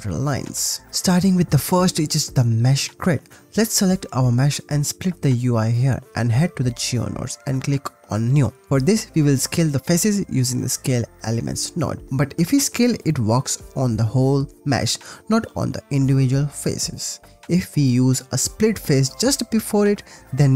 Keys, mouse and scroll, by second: 0.1 click, 0.9-3.0 drag, 5.6-6.6 drag, 7.5-8.2 drag, 7.5 n, 9.0 click, 10.1 shift+a, 12.0 click, 12.1 click, 13.2-14.5 shift+middle drag, 17.1 shift+middle click, 17.2 ctrl+z, 17.2 shift+a.